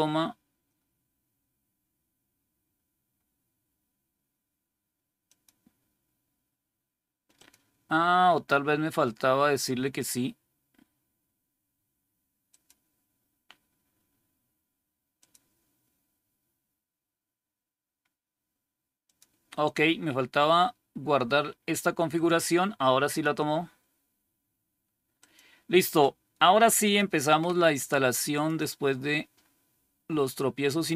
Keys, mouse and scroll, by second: 5.1 click, 7.2 click, 12.4 click, 15.1 click, 19.0 click, 23.0 click, 25.1 click, 26.7 click, 28.2 click.